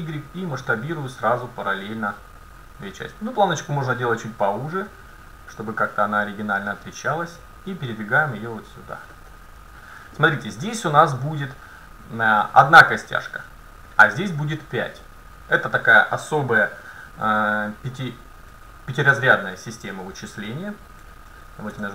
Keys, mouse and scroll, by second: 7.8-9.6 drag, 9.3 middle click, 10.2-11.0 scroll down 1, 11.0 scroll down 1, 11.3-13.1 middle drag, 17.0-18.8 middle drag, 18.8-19.3 scroll up 1, 19.3 middle click, 20.2 middle click, 21.8 n.